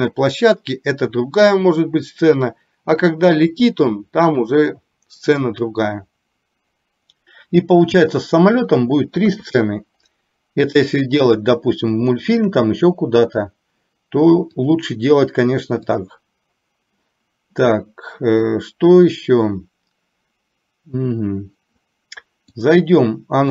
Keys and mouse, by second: 9.3 KP_3, 12.2 shift+middle click, 14.7 click, 22.7 click.